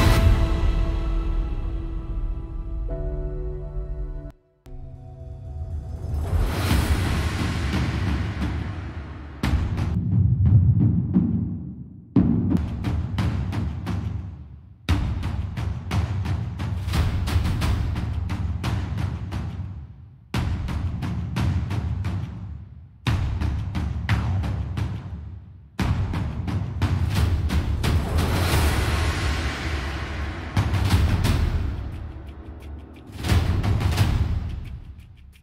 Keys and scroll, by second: 3.9 super+=, 7.5 super+=.